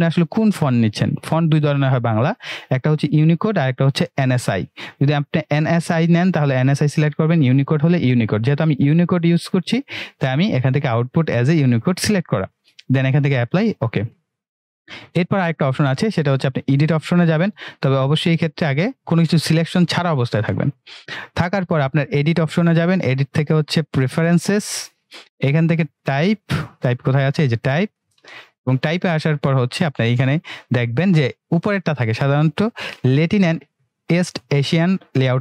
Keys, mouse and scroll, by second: 13.2 click, 14.4 typing, 16.4 click, 27.9 click, 28.4 typing.